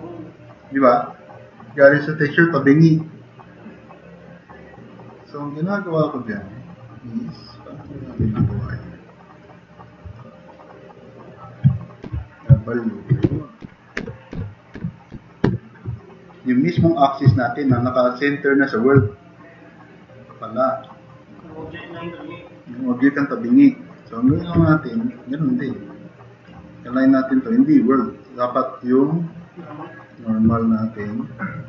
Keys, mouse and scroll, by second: 0.1 s, 8.7-9.4 middle drag, 9.9 middle drag, 12.1 w, 13.3-15.5 typing, 27.7 click, 30.1 click.